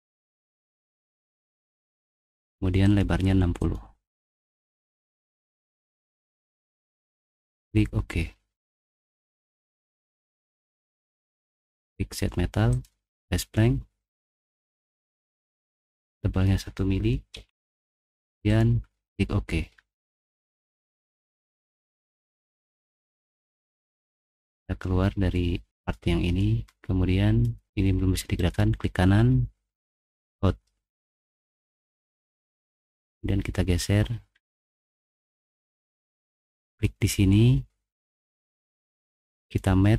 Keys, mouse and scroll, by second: 0.1 middle click, 0.9 middle click, 2.8 click, 3.6 click, 4.9 middle click, 4.9 scroll down 2, 5.1 typing, 7.3 click, 7.9-8.7 typing, 8.2-10.6 middle drag, 10.8 middle click, 12.7 click, 15.8 click, 17.3 1, 18.5 click, 21.3 middle click, 22.0 click, 24.4 click, 26.6 click, 26.7 middle click, 28.6 middle click, 28.6-28.9 scroll down 2, 28.9 right click, 29.3 right click, 30.1 click, 31.6-32.6 drag, 32.6 right click, 33.7 middle click, 34.0 middle click, 34.5 click, 34.6 middle click, 35.5-36.1 scroll up 1, 36.6 right click, 36.7 click, 39.8 middle click.